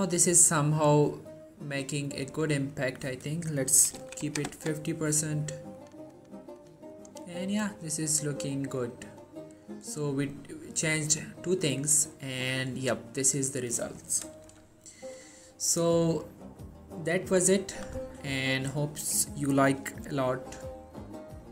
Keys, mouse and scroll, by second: 5.9 click, 10.1 typing, 13.1-14.8 scroll down 1, 15.0-16.6 alt+middle click, 15.6-16.0 alt+scroll up 1, 17.0-20.8 alt+middle drag, 17.3-17.9 typing, 20.1 typing.